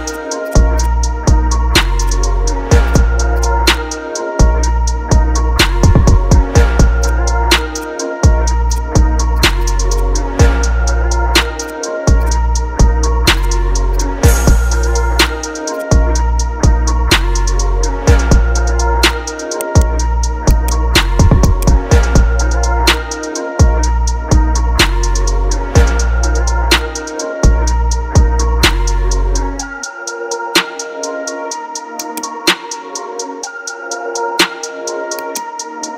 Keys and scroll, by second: 1.1 ctrl+z, 2.4 ctrl+KP_Add, 2.8 space, 6.1 ctrl+z, 12.8 F7, 15.1 ctrl+KP_Subtract, 15.6 space, 16.3 ctrl+KP_Add.